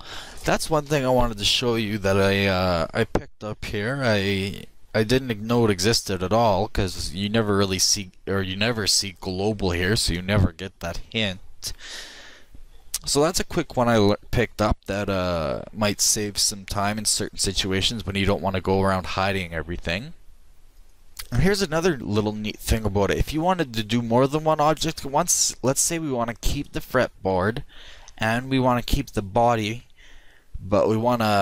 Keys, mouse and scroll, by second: 23.9-25.8 drag, 25.8 middle click, 26.6-28.2 right drag.